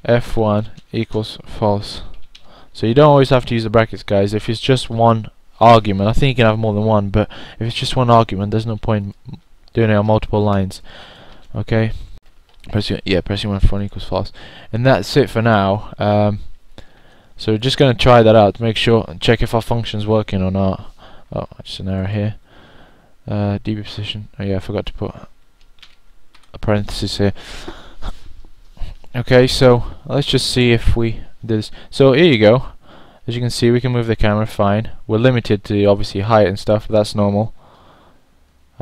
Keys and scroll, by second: 1.7-4.0 typing, 5.1-5.8 typing, 17.2 1, 18.0 1, 18.8 1, 26.3-28.6 typing, 29.7 9.